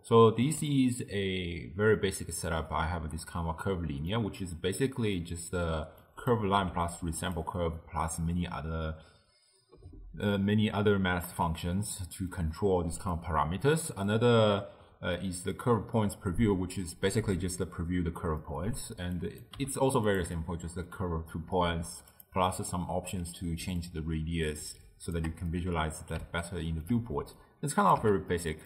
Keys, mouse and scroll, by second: 0.0-6.1 ctrl+middle drag, 6.1 click, 6.6 g, 7.6-10.7 middle drag, 11.4-18.3 middle drag, 18.4-19.2 middle drag, 19.2 click, 19.6 g, 20.4-22.2 middle drag, 22.2 click, 23.9-25.5 shift+drag, 25.5-27.4 middle drag, 27.4 click, 28.0 x, 28.3-28.6 middle drag.